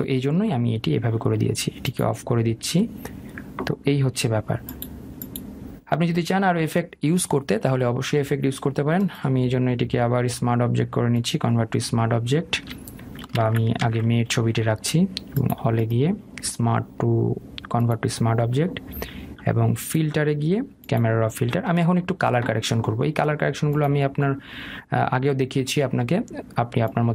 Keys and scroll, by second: 14.4 ctrl+alt+z.